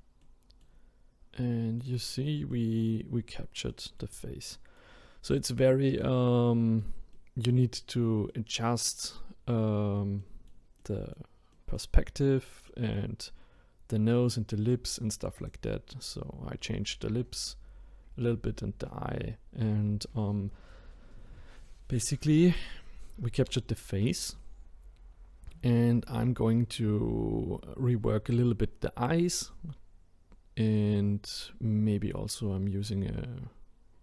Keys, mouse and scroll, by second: 0.2-0.9 middle drag, 0.9-1.4 scroll down 1, 1.4-2.1 middle drag, 2.1-2.5 scroll down 2, 2.5-3.1 middle drag, 3.1-3.7 scroll up 1, 3.7-7.8 middle drag, 7.8-8.3 scroll down 2, 8.3-12.0 middle drag, 12.0-12.7 scroll up 1, 12.7-15.4 middle drag, 15.4 click, 15.8 scroll up 2, 18.9-20.8 scroll up 5, 23.4-24.0 scroll down 1.